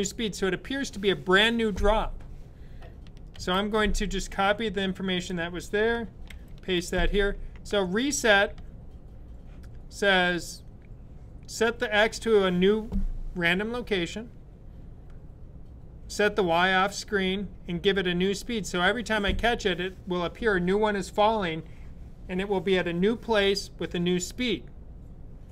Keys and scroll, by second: 3.2 super+c, 6.1 super+v.